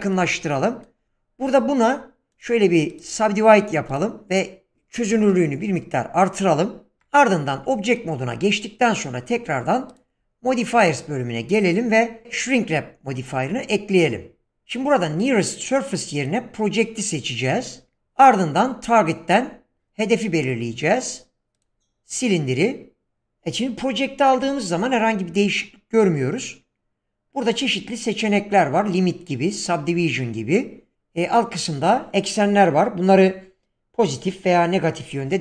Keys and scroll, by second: 1.5 Tab, 4.5-5.2 typing, 7.0 Tab.